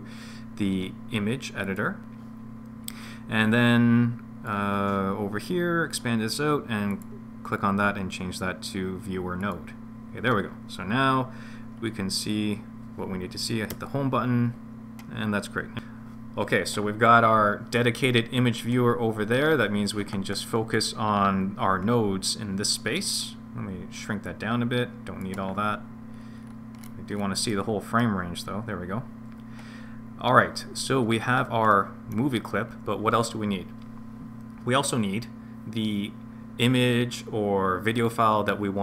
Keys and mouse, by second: 4.5-9.7 drag, 13.7 Home, 24.3-25.3 drag, 27.7 middle click, 31.7 middle click.